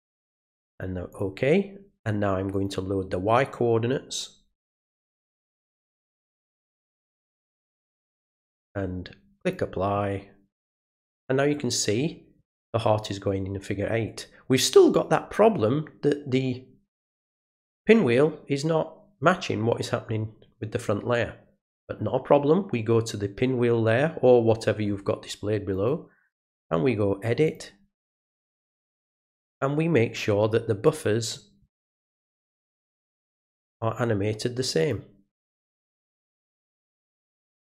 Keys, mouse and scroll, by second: 1.1 click, 2.5 click, 5.0 click, 6.6 click, 7.9 click, 9.4 click, 10.7 click, 21.7 click, 25.7 right click, 27.4 click, 28.9 click, 30.8 click, 33.1 click, 34.8 click, 36.1 click, 37.3 click.